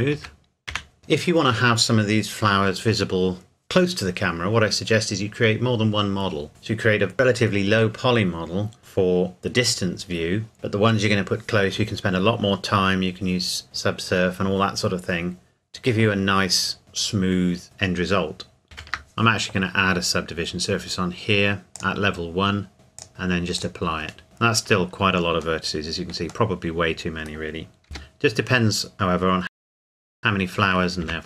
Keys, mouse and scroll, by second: 0.1 Tab, 1.0 middle click, 18.6 ctrl+Num_Lock, 18.6 ctrl+scroll up 1, 18.9 ctrl+1, 21.8 click, 24.2 Tab, 26.5 middle click, 27.9 g, 28.8-29.4 scroll up 1, 29.4 middle click, 29.5 Tab, 29.6 g, 29.7 scroll up 1, 29.8 r, 30.0 click, 30.2 middle click, 31.0 Tab.